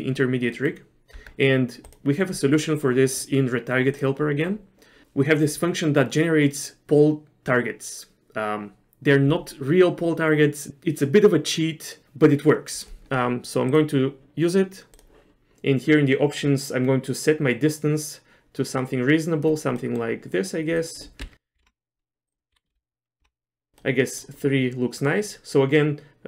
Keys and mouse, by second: 0.0 click, 0.6 middle click, 1.3 Tab, 1.9 click, 4.0 click, 13.8-15.2 drag, 17.1-19.6 drag, 20.0 middle click, 20.9-22.2 drag, 22.3-23.7 drag, 24.0 middle click.